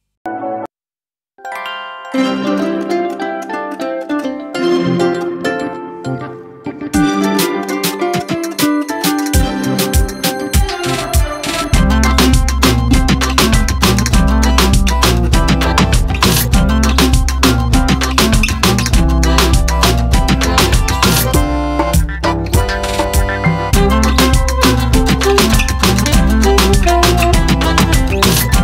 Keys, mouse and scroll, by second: 1.0-4.0 drag, 5.7-8.8 middle drag, 12.5-15.5 middle drag, 15.9-18.9 middle drag, 20.7 click, 21.3-28.6 middle drag.